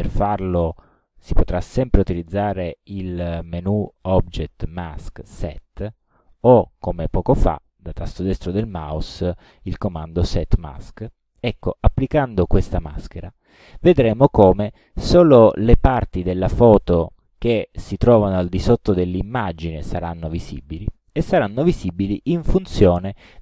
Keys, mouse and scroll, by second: 0.9 click, 6.0 click, 8.5 right click, 13.3 click.